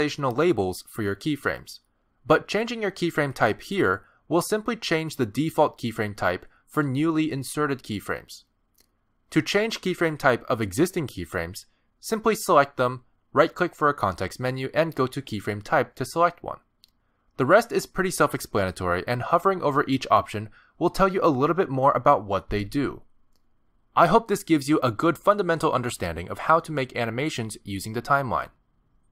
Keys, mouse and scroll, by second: 6.8 click, 7.8 g, 8.4 click, 11.1 click, 13.1 click, 14.5 right click, 19.8 click.